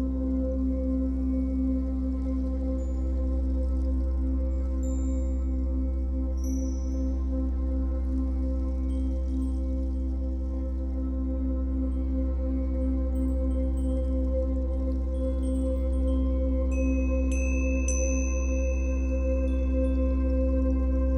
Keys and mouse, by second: 3.5-7.8 ctrl+alt+drag, 8.3 shift+click, 9.7 g, 14.3 click, 15.3 click, 16.4 g, 20.0 click.